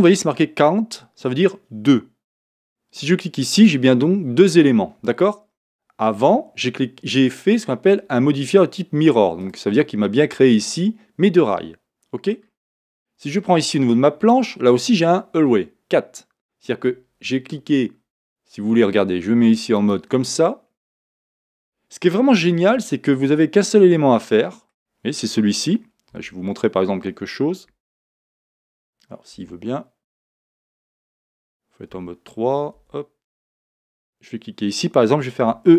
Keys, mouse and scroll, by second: 3.5-7.1 drag, 7.1 scroll up 1, 9.4-10.5 drag, 10.5-13.2 middle drag, 12.5-13.2 scroll up 2, 13.2 click, 19.8 click, 20.8-34.0 middle drag, 22.6 Tab, 23.0-23.4 scroll down 2, 27.6 Escape, 29.4 a, 31.2 Escape, 31.9 3, 32.8 Escape, 34.0 click, 35.4 e.